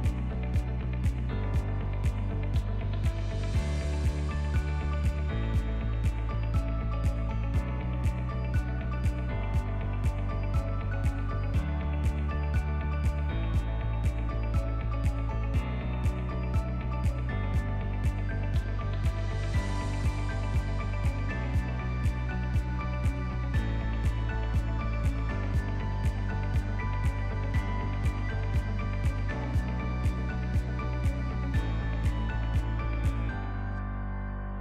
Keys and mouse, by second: 2.5 Tab, 2.7-3.4 middle drag, 3.6 shift+middle click, 4.0-4.3 shift+middle drag, 4.6-5.1 ctrl+middle drag, 5.4 Tab, 5.8 middle click, 6.9 ctrl+r, 9.3 middle click, 10.0 2, 10.3 alt+click, 11.6 middle click, 13.9 alt+shift+click, 15.1 alt+shift+click, 16.5 shift+middle click, 17.3 alt+shift+click, 17.7 shift+middle click, 18.3 alt+shift+click, 19.4 shift+middle click, 20.2 alt+shift+click, 21.1 alt+z, 21.9 alt+z, 22.7 alt+shift+click, 23.7 ctrl+b, 27.7 click, 28.7 click, 30.5-32.5 middle drag, 32.8 KP_1, 33.7 ctrl+click, 34.3 shift+click.